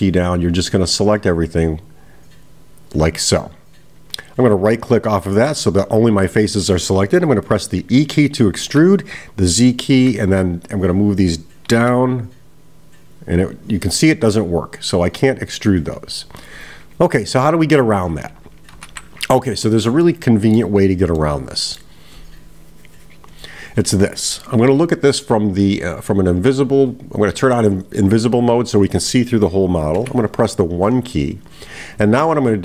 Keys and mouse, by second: 20.0 middle click, 21.2 middle click.